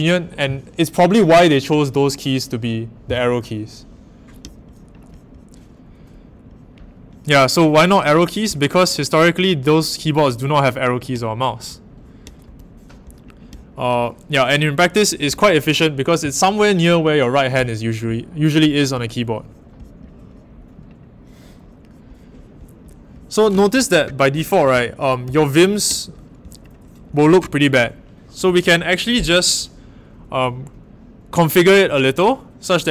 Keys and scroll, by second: 24.7-25.2 typing.